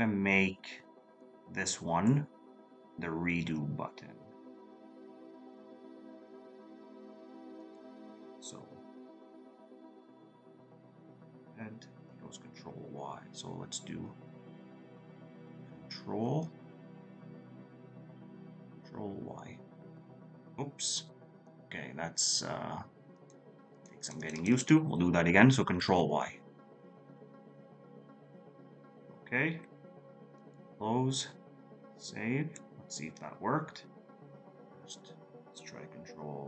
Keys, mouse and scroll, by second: 36.3-36.4 scroll up 1.